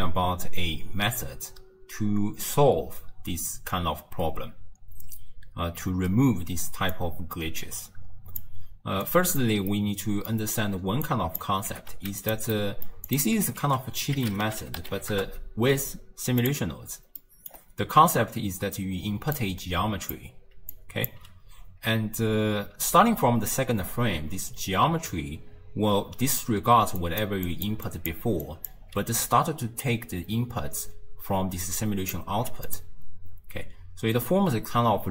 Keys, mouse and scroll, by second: 7.0 click, 9.1 click, 9.8 middle click, 10.5-11.1 scroll down 2, 11.1 click, 11.7 g, 12.6 middle click, 13.1 click, 13.7 ctrl+a, 17.2 middle click, 17.6-18.8 scroll up 1, 18.8-19.4 scroll up 1, 19.4 drag, 20.6 d, 20.8-21.1 drag, 21.1 d, 24.2-29.5 typing, 27.0 click, 27.5 click, 27.9 click, 28.5 click, 30.6-35.1 typing, 31.7 drag, 32.7 click.